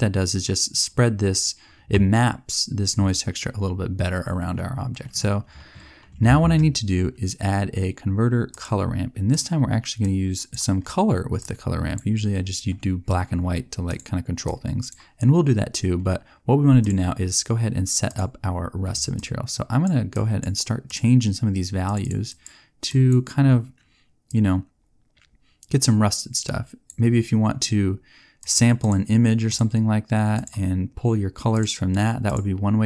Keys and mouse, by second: 6.3 shift+a, 28.3-29.5 drag.